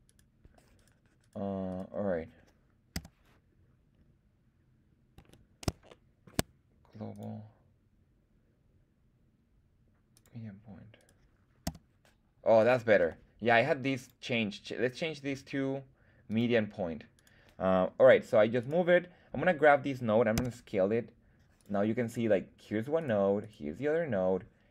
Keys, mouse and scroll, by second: 0.0 right click, 0.7 right click, 1.2 right click, 1.7 right click, 2.9 s, 5.1 Escape, 5.9 shift+middle click, 7.1-10.2 drag, 10.9 click, 10.9 right click, 11.6 s, 12.9 Escape, 13.9-16.4 drag, 17.1 click, 17.1 right click, 18.6 click, 18.6 right click, 20.3 s, 21.5 click, 22.0 click, 22.0 right click, 22.9 click, 22.9 right click, 23.4 click, 23.4 right click.